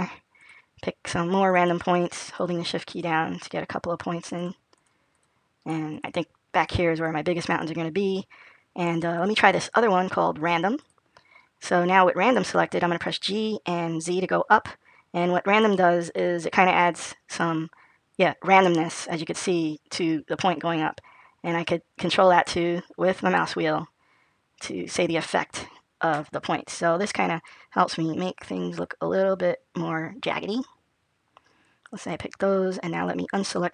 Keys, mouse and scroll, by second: 0.3 click, 1.3 click, 2.1 shift+click, 3.3 click, 4.1 shift+click, 4.6 shift+click, 5.0 shift+click, 6.5 shift+click, 6.8 shift+click, 9.0 click, 12.7 g.